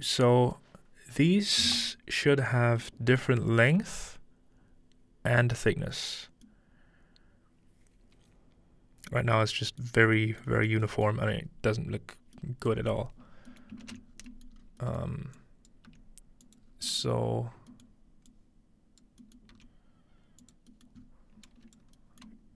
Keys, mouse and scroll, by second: 0.1 middle drag, 0.3-1.5 scroll up 3, 1.5-2.3 scroll down 2, 2.6-4.4 scroll down 3, 3.4-6.2 middle drag, 13.3 middle click, 13.7-15.1 ctrl+middle drag, 14.2 scroll down 1, 14.6 scroll up 1, 15.4-18.3 drag, 15.9 g, 16.7-17.1 scroll down 1, 17.1 scroll up 1, 19.2-20.6 drag, 21.0 scroll up 2, 21.5 click.